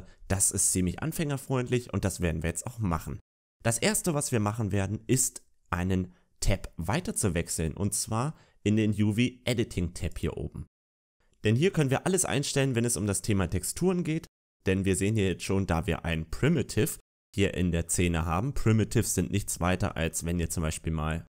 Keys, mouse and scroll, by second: 0.5 right click, 1.0 shift+middle click, 10.0 click, 11.3 middle click, 11.3 scroll down 2, 11.8-12.3 scroll down 2, 12.3-12.7 scroll down 1, 12.7 middle click.